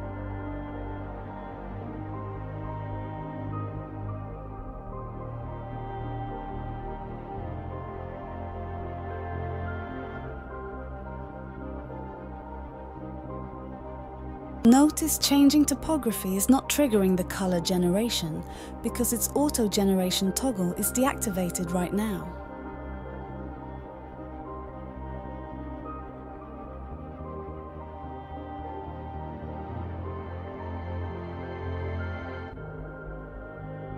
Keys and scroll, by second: 0.8-5.9 typing.